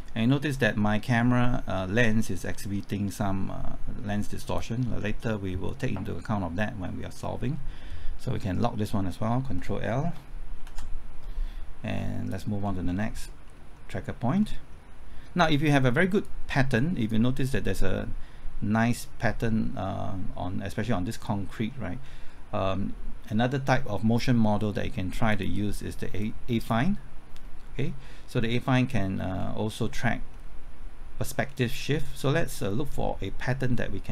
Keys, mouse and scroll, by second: 9.8 typing, 10.6 ctrl+l, 12.3 click, 12.6 scroll down 1, 13.1 scroll up 1, 13.7 scroll down 1, 14.4 middle click, 14.9 scroll up 1, 16.2-17.8 drag, 21.2 scroll down 1, 22.0-25.3 scroll up 1, 25.3 click, 27.4-27.7 scroll up 1, 29.4-30.3 scroll down 1, 30.3-31.4 scroll up 1, 31.4-32.3 scroll down 1.